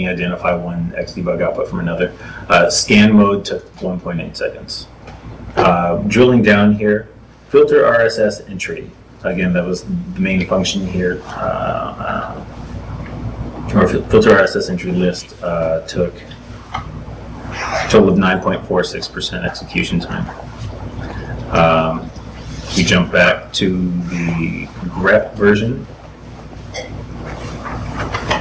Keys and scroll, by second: 6.7 super+Tab, 7.3 super+Tab, 10.9 super+Tab, 18.1 super+Tab, 19.9 super+Tab, 20.5 ctrl+shift+Tab, 21.7 ctrl+Tab.